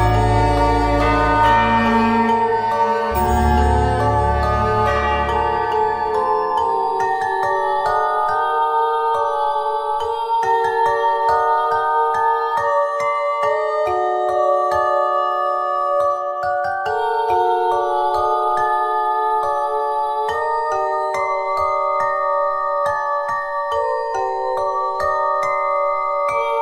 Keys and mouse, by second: 2.0 KP_1, 3.2 click, 4.0 z, 4.4 z, 5.2 z, 6.4 z, 7.0 z, 8.3 z, 8.5 middle click, 9.5-10.9 typing, 13.1 middle click, 14.2 right click, 15.9-17.3 middle drag, 21.1 click, 21.7 Tab, 22.1 click, 23.3 click, 24.4 click, 24.9 Tab, 25.4 click.